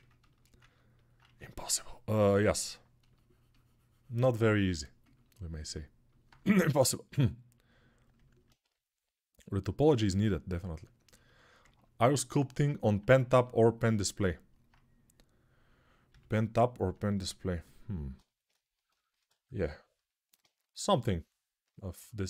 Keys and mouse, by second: 0.4-4.6 ctrl+alt+right drag, 1.0 1, 4.6-8.2 ctrl+alt+drag, 6.3 g, 8.2-11.8 right drag, 8.4 3, 11.8-21.7 ctrl+alt+drag, 15.8 g.